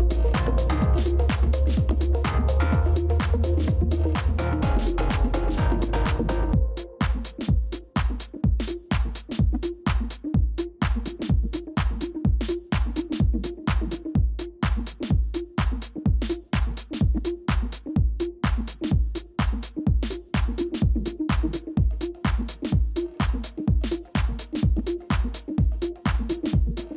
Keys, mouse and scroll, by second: 2.5 shift+click, 6.6 shift+click, 6.9 ctrl+-, 7.1 ctrl+-, 7.6 space, 8.4 ctrl+-, 8.8 ctrl+space, 12.2 right click, 15.7 ctrl++, 15.8 ctrl++, 16.0 ctrl++, 16.6 space, 17.3 ctrl++, 17.4 ctrl++, 17.8 space, 19.0 ctrl+-, 19.1 ctrl+-, 19.2 ctrl+-, 19.7 space, 20.5 ctrl+click, 22.1 ctrl+-, 23.1 ctrl+-, 23.3 ctrl+-, 23.4 ctrl+-, 23.5 ctrl+-, 24.0 space, 25.8 space, 25.9 alt+click.